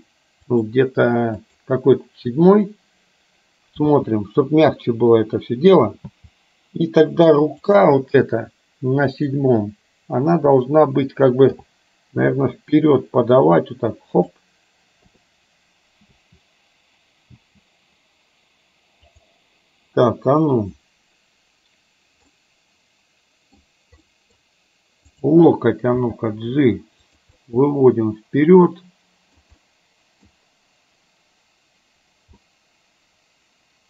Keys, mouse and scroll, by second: 1.5 click, 4.0 space, 6.1 space, 7.6 click, 9.2 click, 11.5 g, 15.1 i, 16.1 space, 17.4 space, 19.1 click, 22.4-23.6 middle drag, 24.1 middle click, 25.1 click, 26.1 g, 27.5-29.5 middle drag, 29.6 scroll up 1, 29.7 middle click, 30.2 scroll down 1, 32.6-33.8 middle drag.